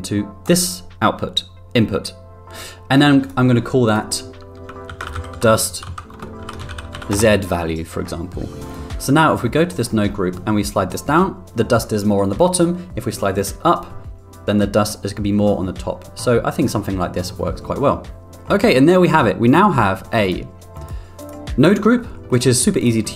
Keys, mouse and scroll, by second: 3.2 click, 3.8-7.9 drag, 8.6 click, 9.3 middle click, 9.7 middle click, 10.6-16.6 drag, 18.3 middle click, 18.3 n, 20.2-20.8 drag, 21.2 click, 21.8 middle click, 22.3 middle drag, 22.8 click.